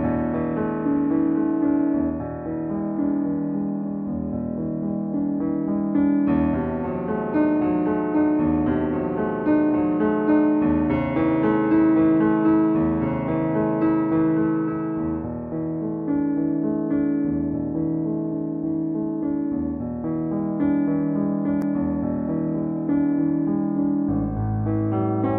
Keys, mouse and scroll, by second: 1.2 click, 4.2 click, 6.2-7.8 middle drag, 7.8 shift+click, 9.3 shift+click, 10.7 shift+click, 11.8-14.3 middle drag, 14.3-15.3 scroll down 1, 15.3 scroll, 15.4-16.9 scroll up 1, 17.0 x, 18.6 click, 19.7 middle click, 19.7 middle click, 21.1-25.3 middle drag.